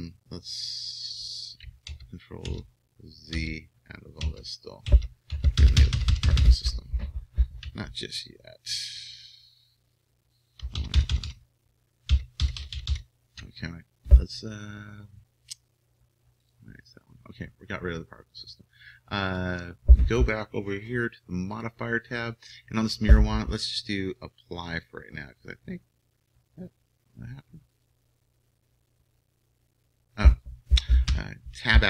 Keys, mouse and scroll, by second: 1.9 ctrl+z, 2.5 ctrl+z, 3.3 ctrl+z, 4.2 ctrl+z, 4.9 ctrl+z, 5.4 ctrl+z, 5.7 ctrl+z, 10.7-11.1 ctrl+shift+z, 12.1 ctrl+shift+z, 12.5 ctrl+shift+z, 16.5-18.4 drag, 31.3 Tab.